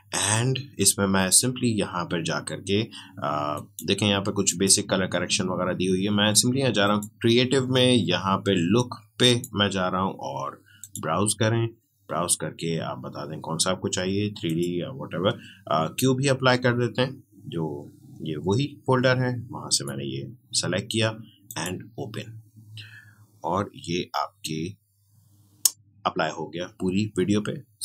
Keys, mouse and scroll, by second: 3.5 click, 3.5 click, 6.8 click, 9.2 click, 14.4 click, 19.7 click.